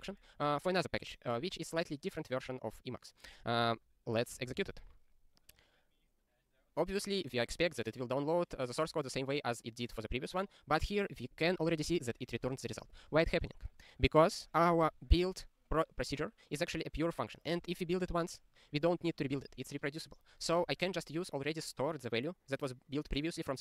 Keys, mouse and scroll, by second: 6.7 ctrl+e, 13.2 ctrl+a, 13.2 ctrl+s, 13.9-17.6 scroll up 55, 18.1 click, 18.7 click, 19.3 click, 19.4 double click, 20.7 click.